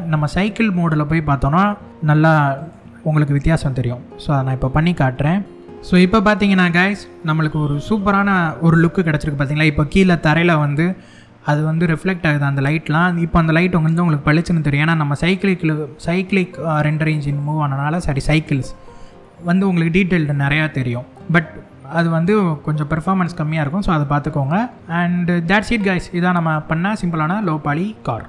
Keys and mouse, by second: 2.2 click.